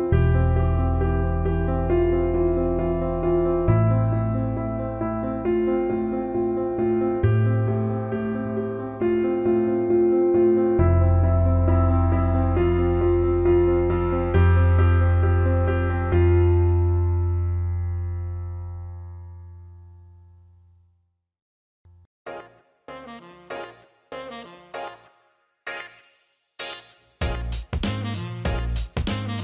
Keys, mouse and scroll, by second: 0.3 Tab, 1.1 Tab, 2.3 p, 3.6 Tab, 4.6 click, 5.0-9.3 right drag, 9.3 Tab, 10.9 s, 13.5 click, 14.4 click, 15.5 alt+shift+middle click, 16.3 alt+shift+middle click, 16.7 click, 17.3 alt+middle click, 20.4 click, 21.3-23.9 drag, 26.6-29.3 drag.